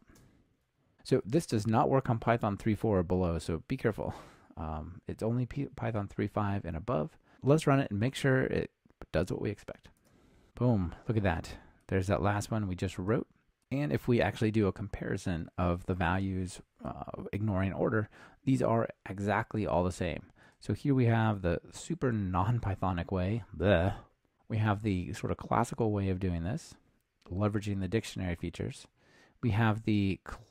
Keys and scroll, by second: 10.0 ctrl+r.